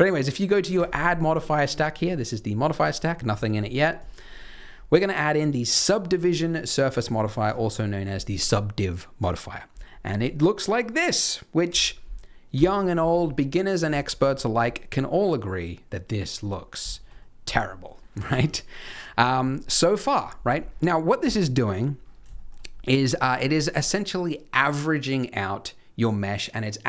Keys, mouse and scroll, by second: 0.7 click, 3.0 scroll down 4, 3.2-3.9 scroll up 3, 3.9 click, 11.6 KP_1, 12.5 KP_3, 13.2-13.6 scroll up 1, 13.6 scroll down 1, 13.9 shift+middle click, 14.3 scroll down 2, 14.7 middle click, 16.5 scroll up 1, 16.8 shift+middle click, 17.2 middle click, 17.6 scroll up 1, 18.0-19.1 scroll down 2, 18.4-19.1 scroll up 1, 19.1-19.5 scroll down 1, 19.5-19.9 scroll down 1, 20.6-21.1 scroll up 2, 21.8-22.1 scroll down 1, 22.1 scroll up 1, 22.3 shift+middle click, 23.0 middle click.